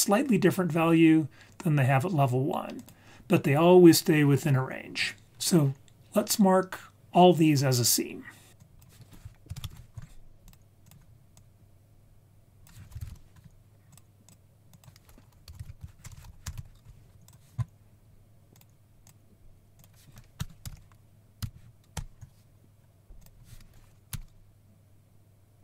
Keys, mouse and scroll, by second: 2.7-3.2 drag, 8.5 ctrl+z, 8.6 click, 10.1 click, 10.8-11.2 drag, 11.3-14.0 drag, 14.2 click, 14.7-16.1 drag, 16.1 BackSpace, 17.2 click, 18.5-19.0 drag, 19.7 click, 20.7 6, 23.2-25.6 drag.